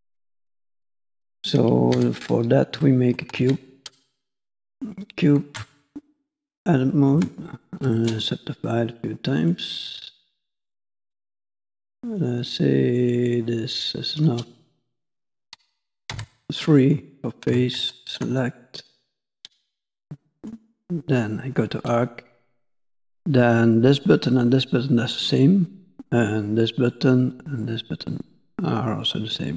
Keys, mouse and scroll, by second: 0.8 scroll down 2, 0.9 middle click, 2.0 x, 2.8 middle click, 3.4 shift+a, 5.5 Tab, 7.2 shift+middle click, 7.9 right click, 11.1 click, 11.3 click, 11.6 click, 11.8 click, 14.4 middle click, 16.2 3, 16.8 click, 17.8 ctrl+click, 18.4 middle click, 20.4 click, 21.1 click.